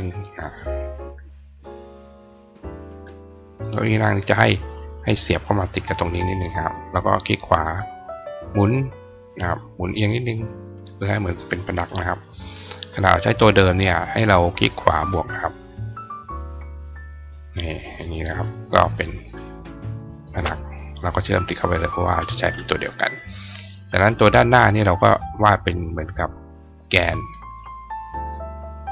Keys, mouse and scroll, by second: 0.8 click, 1.9 click, 3.4-5.0 drag, 6.5 click, 7.7-10.6 drag, 12.2 click, 14.0-15.5 drag, 15.4 right click, 16.0-17.3 drag, 17.7 click, 18.3 click, 20.2 shift+click, 21.2 click, 21.7 click, 23.9 click, 26.2-28.6 drag.